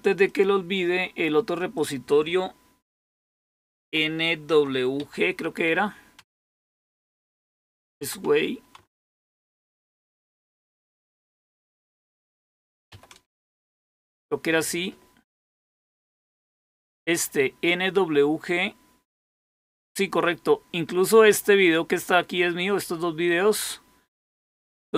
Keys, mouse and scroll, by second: 0.2 click, 0.6 click, 1.7 click, 4.2-6.1 typing, 7.6-13.3 typing, 24.8 click.